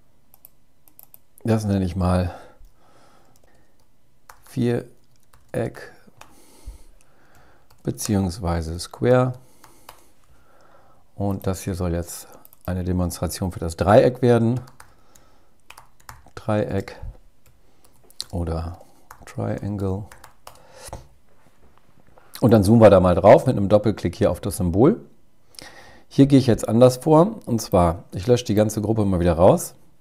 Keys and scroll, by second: 6.6 alt+7, 16.8 alt+7.